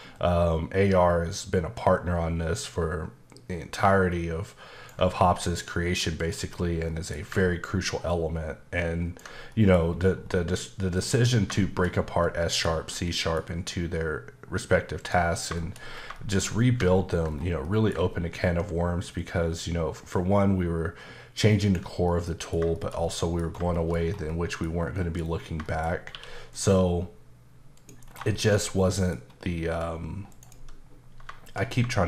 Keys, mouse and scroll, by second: 0.2 ctrl+click, 6.5-6.9 scroll down 2, 6.9 middle click, 7.2 scroll up 1, 8.1 ctrl+click, 9.5 middle click, 9.8-11.0 scroll up 2, 11.0 click, 11.6 shift+middle click, 11.8 middle click, 11.9-12.2 scroll up 2, 12.2 middle click, 12.8 scroll down 2, 13.0 middle click, 13.5-14.3 scroll up 1, 15.0 click, 15.5 middle click, 15.9 scroll up 1, 16.1 middle click, 16.4 scroll down 1, 17.2-17.6 scroll down 1, 17.6 middle click, 19.2 click, 22.1 middle click, 22.7 shift+middle click, 23.4 scroll up 2, 23.7 shift+middle click, 24.0 scroll down 1, 24.3 middle click, 25.0 middle click, 25.2 scroll up 1, 25.6 shift+middle click, 25.9 scroll up 1, 26.1 q, 26.5 click, 27.7 click, 28.0 scroll down 1, 28.3 shift+middle click, 28.5 middle click, 28.6 scroll down 1, 28.8 middle click, 29.2-29.8 scroll up 1, 29.8 click, 30.3 right click.